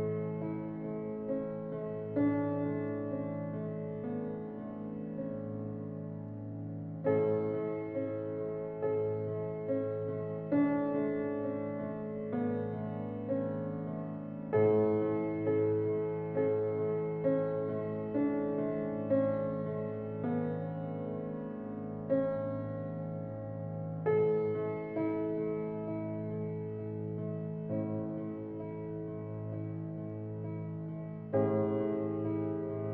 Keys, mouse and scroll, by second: 3.6-8.1 scroll up 1, 8.1 drag, 8.9 click, 11.6-12.4 scroll down 4, 12.9 click, 14.1-17.4 drag, 27.2 drag, 28.5 click, 30.5-32.8 drag.